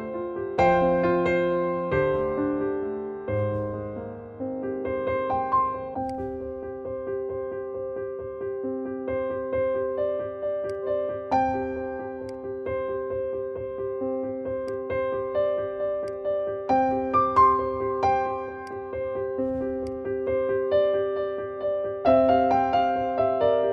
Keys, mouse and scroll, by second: 6.0 click, 10.6 click, 14.5 click, 18.5-23.7 drag.